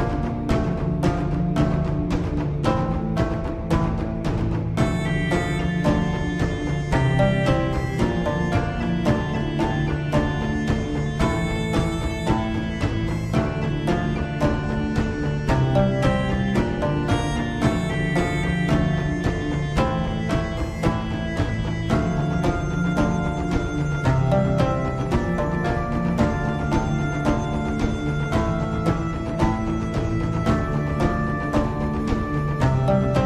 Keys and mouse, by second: 3.3 g, 8.7 KP_7, 18.1 g, 27.1 s, 32.5 g.